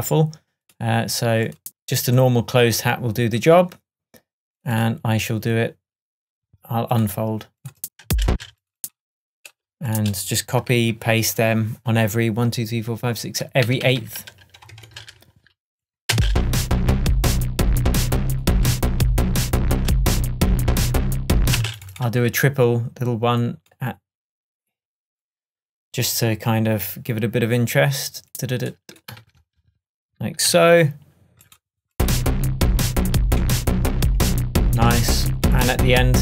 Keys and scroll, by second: 8.1 space, 10.8 shift+super+d, 13.7 super+d, 14.7 shift+super+d, 14.8 shift+super+Tab, 16.2 space, 21.6 space, 29.3 super+s, 30.6 super+d, 33.5 shift+Tab.